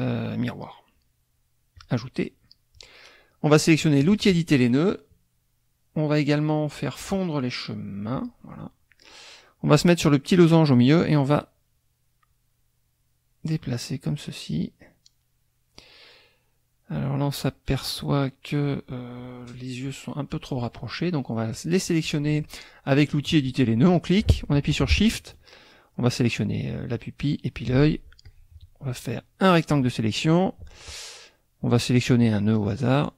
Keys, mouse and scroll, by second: 1.7 click, 4.0 click, 8.1 click, 10.5-18.0 drag, 21.6 click, 26.1 shift+click, 27.3 shift+click, 28.2-29.7 drag, 32.8-33.1 drag.